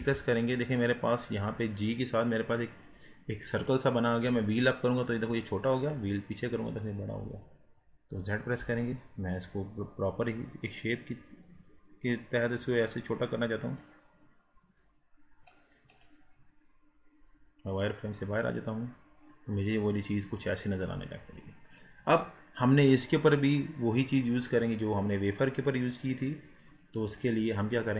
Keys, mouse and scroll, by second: 0.0 g, 14.2-14.8 scroll down 4, 14.8 middle click, 15.5 click, 16.4-16.7 scroll down 2, 16.7-18.0 scroll up 4, 18.0-19.0 drag, 19.0-22.0 middle drag, 24.2 scroll down 2, 24.9 scroll up 1, 25.8-26.4 scroll down 1, 26.4 scroll up 4, 27.1 click.